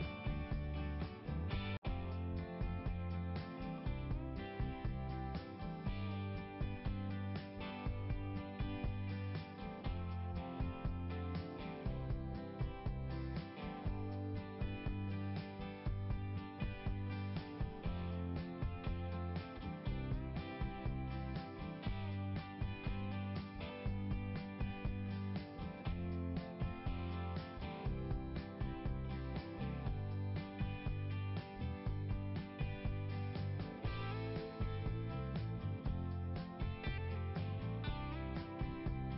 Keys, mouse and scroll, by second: 6.0 scroll up 1, 9.6 click, 9.7 click, 10.0 click, 12.7 right click, 12.8 right click, 14.4 click, 14.6 click, 18.5 scroll down 1, 19.5-20.8 scroll up 1, 23.1 scroll up 1, 23.3-24.4 scroll down 1, 24.4 click, 25.4 click, 25.6 click, 25.7 double click, 28.0 scroll down 1, 31.0 click, 31.1 click, 32.5 click, 32.7 click, 34.7 click, 34.8 click, 36.2 click, 36.3 click, 37.1 click.